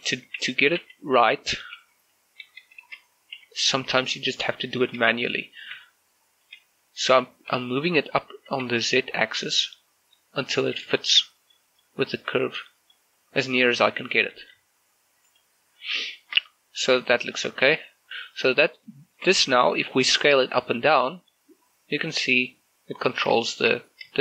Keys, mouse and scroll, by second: 0.5 ctrl+z, 4.2 shift+middle click, 5.1 scroll up 1, 5.7 scroll down 1, 5.9 shift+middle click, 6.6-7.2 scroll up 1, 7.2 g, 8.6 z, 10.7 click, 11.0 shift+middle click, 11.5 middle click, 13.1 scroll up 1, 14.3 g, 14.6 z, 15.3 click, 15.7-16.0 scroll down 1, 16.1 shift+middle click, 16.8 middle click, 18.0 middle click, 18.0-18.7 scroll up 2, 18.7 scroll down 2, 19.3 scroll up 2, 19.5 middle click, 20.0 shift+middle click, 20.6 s, 23.2 right click, 23.5 shift+middle click.